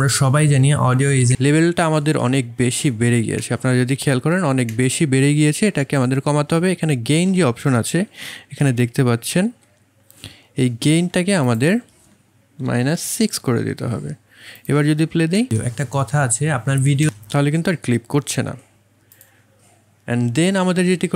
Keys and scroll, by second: 7.9 1, 8.4 2, 12.6 KP_Subtract, 13.0 KP_6, 15.3 space.